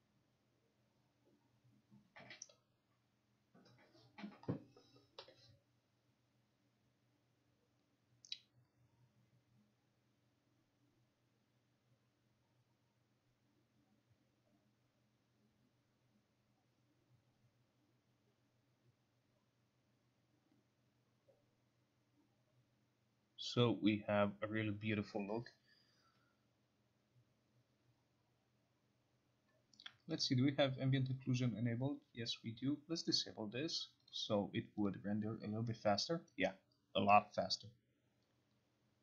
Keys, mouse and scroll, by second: 30.3 click, 33.2 click, 34.2 click, 35.0 click.